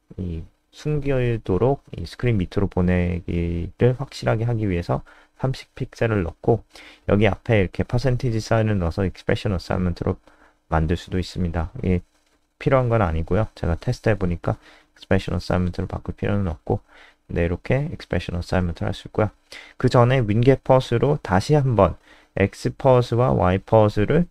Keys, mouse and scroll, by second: 1.3 shift+End, 2.2 Left, 2.8 %, 6.8 click, 14.3 Up, 14.4 Up, 14.8 End, 16.1 Return, 17.0-24.3 typing.